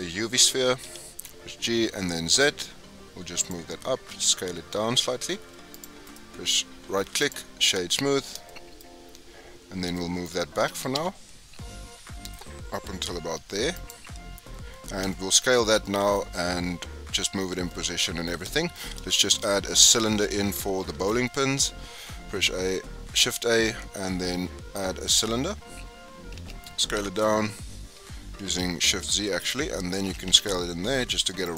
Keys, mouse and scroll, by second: 0.8 g, 4.0 s, 6.0-7.8 right drag, 7.8 scroll up 5, 8.4-8.8 shift+middle drag, 9.1-9.7 scroll down 11, 9.9-10.6 shift+middle drag, 10.6 g, 14.5-15.0 scroll up 1, 15.0-18.8 shift+middle drag, 18.8-20.9 scroll up 5, 19.0-19.4 shift+middle drag, 20.9 shift+a, 25.6-26.3 scroll down 3, 26.3 s, 30.0 s.